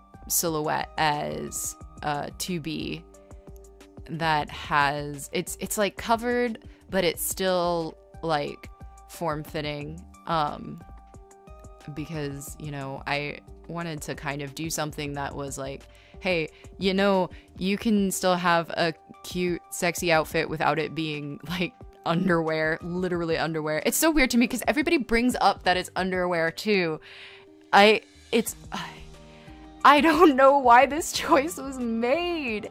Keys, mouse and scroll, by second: 3.2 ctrl+z, 4.6 space, 6.4-13.4 typing, 13.5 ctrl+z, 14.8 right click, 25.8 ctrl+z, 28.1 ctrl+z, 30.1 ctrl+z, 30.6 ctrl+z, 30.7 ctrl+z, 32.6 ctrl+z.